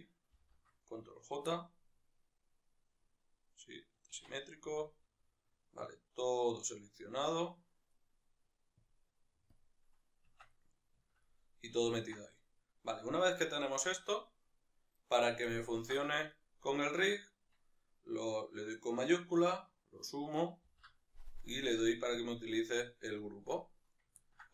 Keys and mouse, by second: 0.5 ctrl+j, 1.5-9.6 middle drag, 4.1 Tab, 9.6-10.6 drag, 10.4 Tab, 10.6-16.3 middle drag, 16.3-22.4 shift+right drag, 22.4 ctrl+p, 24.3-24.5 ctrl+middle drag.